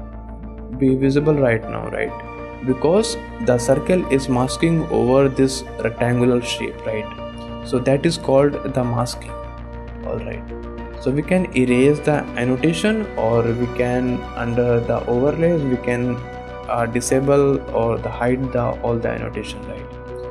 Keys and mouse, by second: 0.0 click, 0.4 click, 0.9 click, 1.3 click, 1.7 click, 2.2 click, 2.8 shift+click, 7.2 shift+click, 11.7 click, 14.4-17.3 drag, 18.4 click, 19.0 middle click, 19.2 click, 19.5 shift+click, 20.1 click.